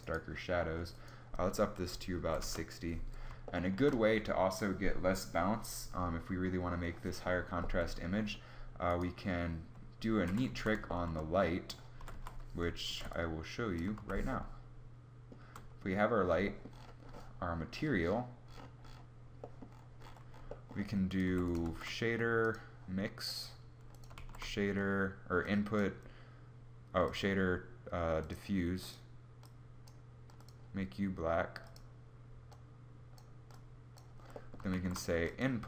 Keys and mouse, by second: 9.7 KP_5, 9.9 z, 11.6 z, 11.7 z, 12.4 ctrl+b, 13.7 shift+z, 17.6 ctrl+b, 17.6 z, 20.8 g, 21.2 shift+a, 23.2 ctrl+b, 23.2 z, 23.8 shift+a, 29.6 ctrl+b, 29.6 z, 34.2 shift+a.